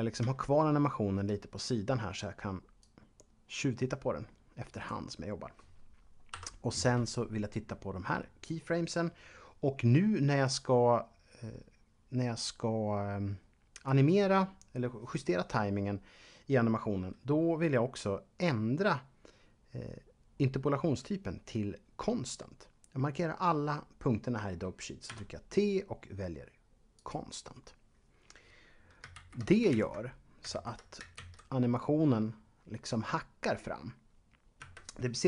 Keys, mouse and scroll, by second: 0.6 shift+double middle click, 2.8 click, 6.3 Home, 25.1 t, 26.9 click, 29.4 Left, 29.9 Up, 30.7 Left, 31.2 alt+a, 34.6 Escape.